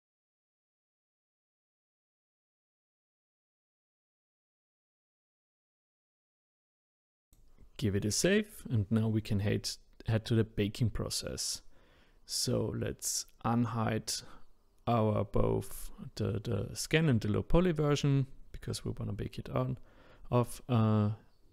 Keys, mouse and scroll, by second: 8.2 click, 11.6 click, 12.1 click, 13.0 click.